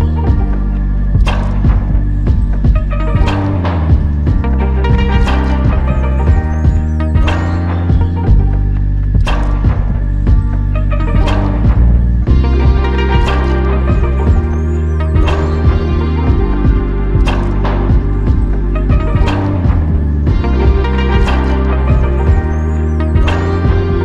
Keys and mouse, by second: 2.3 alt+click, 7.1 double click, 15.4 ctrl+click, 17.6 ctrl+click, 19.5 w, 21.3 alt+click.